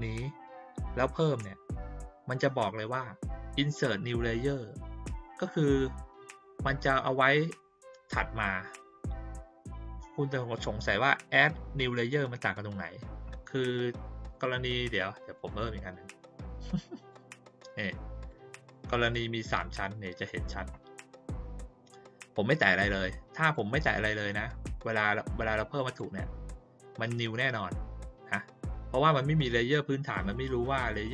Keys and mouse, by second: 15.3 click, 16.6 click, 18.3-18.7 drag, 19.7 click, 21.4 click, 23.4 click, 25.8 click, 29.9 click, 30.3 click, 30.6 click, 30.8 click, 31.0 click.